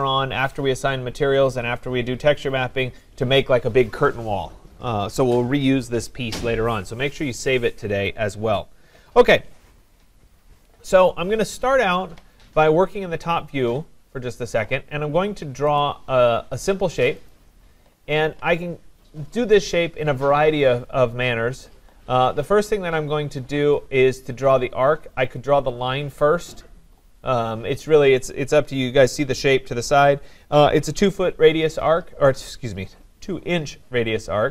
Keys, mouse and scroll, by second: 15.8 click, 17.1 click, 17.3 click.